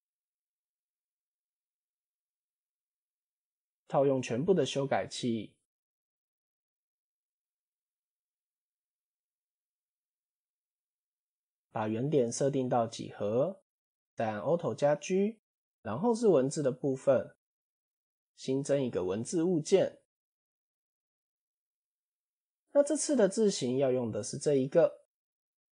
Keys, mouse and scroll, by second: 0.2 click, 0.6 click, 1.1 click, 1.7 click, 4.2-4.8 scroll up 4, 5.0 click, 6.9 Tab, 7.8 a, 8.5 m, 9.9 Tab, 10.8-12.8 right drag, 14.1 alt+g, 14.8 scroll up 1, 15.0-15.4 shift+middle drag, 15.9 click, 17.6 shift+a, 20.5 click, 21.7-22.7 scroll down 6, 23.4 click.